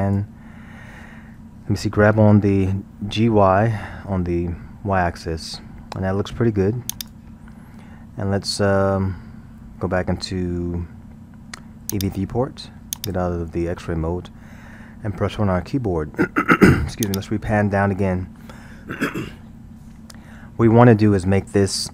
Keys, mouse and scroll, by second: 3.0 g, 11.9 click, 13.0-13.4 drag, 15.1 KP_1, 15.7-16.0 scroll, 17.1-20.1 drag.